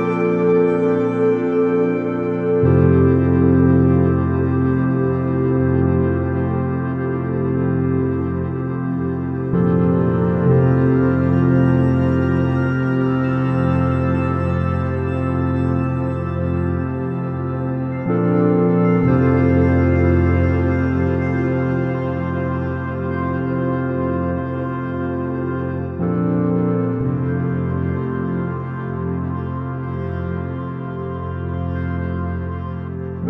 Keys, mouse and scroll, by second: 0.5 s, 5.7 KP_0, 8.7 shift+z, 18.6-20.4 drag, 21.1 KP_0, 28.1 shift+z, 29.7 KP_1, 31.4-32.8 middle drag.